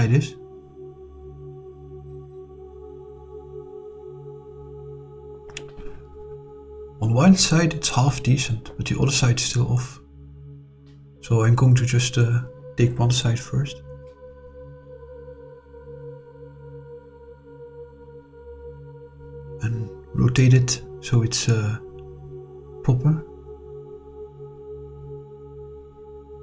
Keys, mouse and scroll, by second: 1.2 click, 4.1 click, 4.7-8.6 middle drag, 10.0 click, 10.7 click, 11.6 click, 12.3 shift+click, 13.7 click, 14.4 click, 17.6 ctrl+z, 18.4 click, 24.4 click, 24.8-25.2 drag.